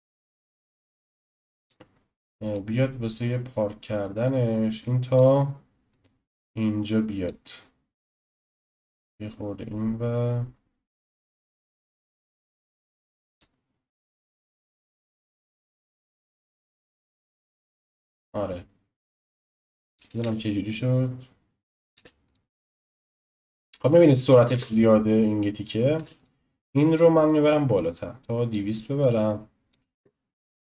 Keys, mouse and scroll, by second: 2.5 drag, 5.9-8.7 drag, 15.0 click, 15.8-19.0 drag, 20.2 space, 21.9 space, 22.2 click, 23.7 click, 24.5 space, 25.9 space, 26.2 click, 26.9 click, 29.0 click, 29.9 space.